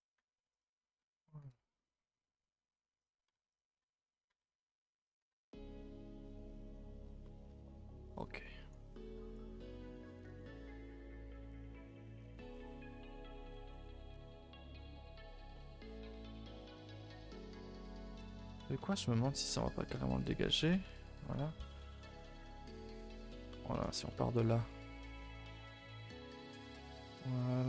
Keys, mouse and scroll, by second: 0.5 alt+click, 1.4 g, 3.5 alt+click, 4.2 r, 5.1 g, 6.5 z, 7.2 shift+middle click, 7.5 a, 7.7 a, 7.8 scroll down 2, 8.0 middle click, 8.7 scroll up 1, 8.8 a, 8.9 a, 9.0 middle click, 9.2 3, 9.5 click, 9.7 shift+click, 9.9 shift+click, 10.1 shift+click, 10.3 middle click, 10.6 g, 11.8 click, 12.0 g, 13.2 g, 14.1 middle click, 14.5 g, 15.5 middle click, 16.5 g, 17.2 middle click, 17.9 scroll up 2, 18.1 middle click, 18.3-18.7 scroll down 1, 18.7 middle click, 19.0 scroll up 1, 19.2 middle click, 19.4 2, 19.7 alt+click, 20.5 ctrl+Delete, 20.8 a, 21.0 a, 21.2 3, 21.7 click, 22.0 shift+click, 22.2 shift+click, 22.4 shift+click, 22.7-24.3 middle drag, 24.3 g, 25.1 middle click, 26.0 g, 26.7 middle click, 27.4 click.